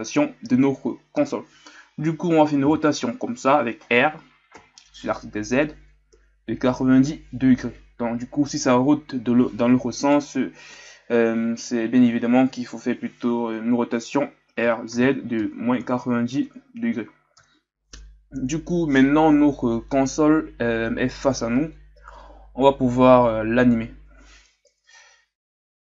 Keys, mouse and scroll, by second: 2.6 r, 25.1-25.7 scroll down 2.